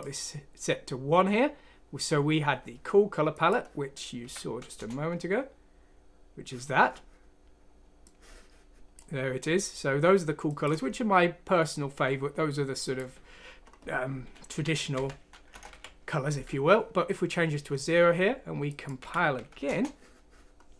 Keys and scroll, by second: 4.2 F6, 4.7 Return, 14.5 Right, 14.9 Left, 15.7 0, 18.9 F6, 19.6 Return.